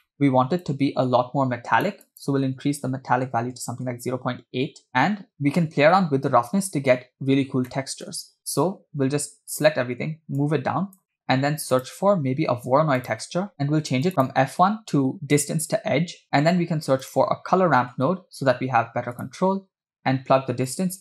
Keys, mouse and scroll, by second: 0.0 middle click, 0.6-2.3 drag, 2.4-4.0 drag, 7.4 scroll down 2, 7.7 middle click, 8.5-9.7 drag, 10.4 click, 11.1 middle click, 11.3 scroll up 2, 11.8 shift+middle click, 11.8 click, 12.5 shift+a, 13.6 scroll up 1, 14.1 click, 14.2-15.7 drag, 16.3 shift+a, 20.7-21.0 drag.